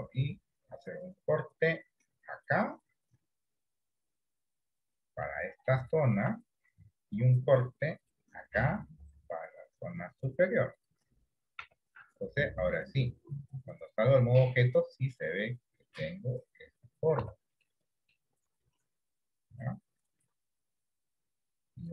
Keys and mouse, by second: 0.7 ctrl+r, 5.4 middle click, 6.1 shift+middle click, 7.2 ctrl+r, 11.8 Tab, 12.1-13.1 middle drag, 14.7-17.6 middle drag, 17.5 Tab, 17.8 middle click.